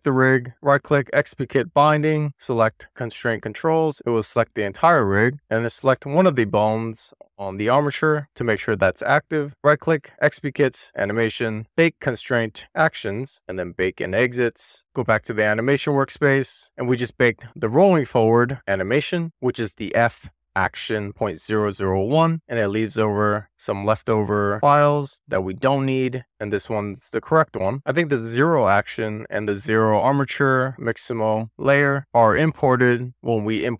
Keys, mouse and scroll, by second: 0.3-3.2 right drag, 4.4-4.8 scroll up 3, 5.3 middle click, 7.9 click, 10.1-14.0 right drag, 14.0 click, 14.5-15.7 scroll down 1, 15.7 click, 17.8-26.3 drag, 27.6-33.7 drag.